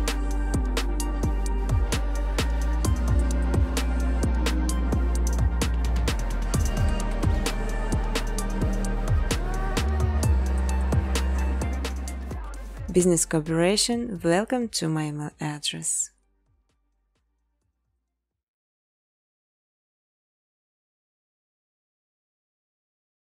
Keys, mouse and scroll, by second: 0.0 space, 0.2 space, 2.0 space, 3.0 click, 3.9 click, 4.3 click, 4.6 click, 5.8 click, 7.1 click, 8.2 scroll, 8.8 click, 9.0 click, 10.0 click, 10.0 2, 10.2 2, 10.4 click, 10.8-11.4 scroll, 11.5 click, 12.3 click, 12.9 scroll down 2, 12.9 6, 13.0 6, 13.2 click, 13.5 space, 17.8 space, 18.1 space, 18.6 space, 18.9-19.3 scroll, 19.7 click, 20.6-23.0 typing, 22.5-23.2 scroll down 7.